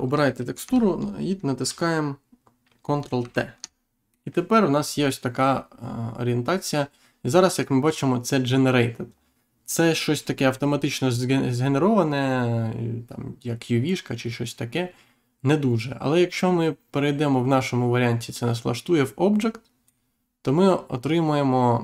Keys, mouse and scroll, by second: 3.1 ctrl+t, 4.0 middle click, 4.7-5.1 scroll up 1, 16.3 click.